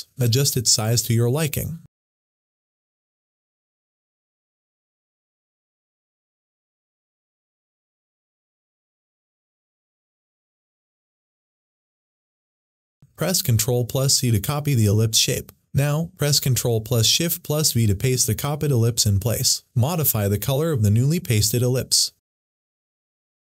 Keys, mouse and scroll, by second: 0.1-3.1 drag, 3.1 ctrl+t, 3.9-10.5 drag, 10.6 click, 13.4 ctrl+click, 13.8 ctrl+c, 17.9 ctrl+c, 19.1 v, 22.5 click, 22.5 click.